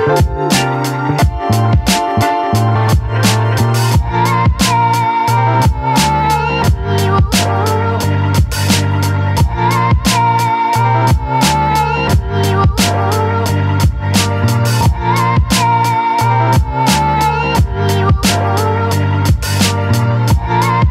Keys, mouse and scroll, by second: 0.0 click, 0.3 scroll down 2, 0.5 middle click, 2.7 click, 3.0-5.9 middle drag, 5.9-6.6 ctrl+z, 7.1 ctrl+z, 7.3 scroll down 1, 7.4 middle click, 7.6 scroll up 2, 7.9 ctrl+z, 8.1 ctrl+z, 8.4 middle click, 8.6 scroll up 1, 8.8 shift+middle click, 9.5 s, 10.9 shift+click, 11.4 middle click, 11.7 ctrl+click, 12.5 middle click, 14.7 KP_3, 15.3 r, 16.5-18.4 typing, 18.6-19.5 scroll down 1, 19.5 middle click, 19.7 r.